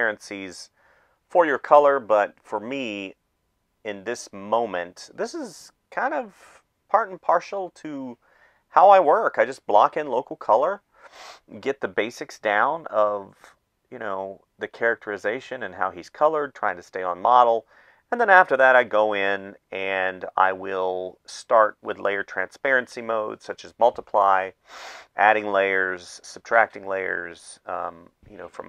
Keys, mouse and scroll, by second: 0.0-0.8 typing, 2.6 space, 3.7 space, 5.6 space, 7.1 space, 7.5 space, 8.7 space, 10.7 space, 12.9 space, 14.3 space, 15.4 space, 19.7 space, 22.3 space, 22.7 ctrl+z, 24.1 space, 24.8 space, 25.2 space, 25.6 space, 27.1 space.